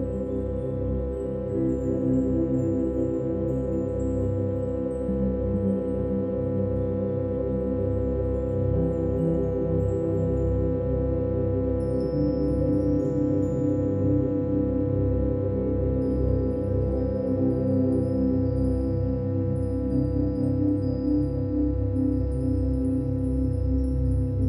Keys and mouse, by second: 1.3-5.2 ctrl+alt+drag, 5.5-7.2 drag, 7.6-9.5 alt+drag, 10.0 click, 12.0-15.5 alt+drag, 15.9-20.2 drag, 20.9-22.0 alt+drag, 22.7-24.2 drag.